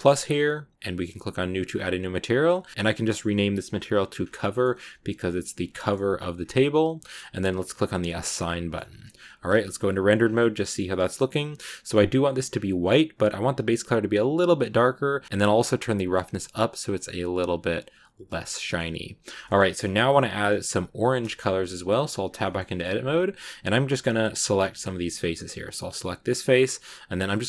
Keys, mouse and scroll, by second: 2.2 click, 2.7 shift+middle click, 2.9 click, 4.1-4.4 scroll up 2, 4.4 middle click, 5.0-5.6 scroll up 1, 5.6-6.8 shift+middle drag, 6.8-7.9 scroll down 1, 7.9 click, 8.3 middle click, 9.1 Tab, 10.1 scroll down 2, 10.2-11.8 middle drag, 11.8-12.4 scroll up 2, 12.4-13.3 scroll down 2, 13.3 click, 15.2 scroll down 1, 15.2-18.4 drag, 18.4-20.7 middle drag, 20.7 scroll up 1, 21.0 middle click, 21.3 Tab, 22.3 shift+middle click, 22.8-25.8 scroll up 1, 25.8 right click.